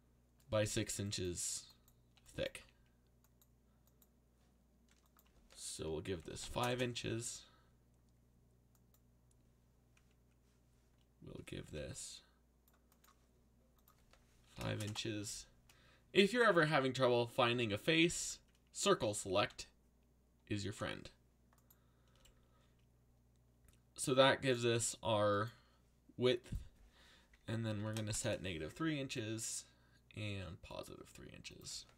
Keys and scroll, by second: 2.5 a, 5.8-7.1 typing, 11.6 c, 14.4 5, 14.7 shift+', 14.8 Return, 17.5 z, 19.4 c, 20.7 c, 27.4-28.6 typing.